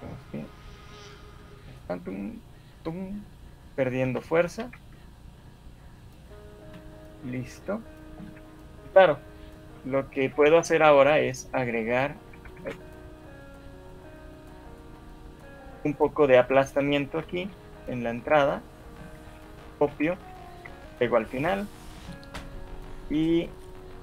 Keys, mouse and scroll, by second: 4.0 a, 4.7 a, 6.6 alt+shift+2, 7.2 scroll up 2, 8.2 Escape, 8.8 KP_1, 9.6 shift+middle click, 11.0 alt+shift+1, 12.4 alt+shift+1, 12.6 alt+shift+2, 13.6 click, 13.8-14.2 scroll up 4, 14.2 shift+middle click, 14.6 scroll up 1, 14.8 shift+middle click, 15.8 click, 17.2 g, 20.0 ctrl+c, 20.0 shift+Right, 20.6 Right, 21.4 ctrl+v, 23.6 right click.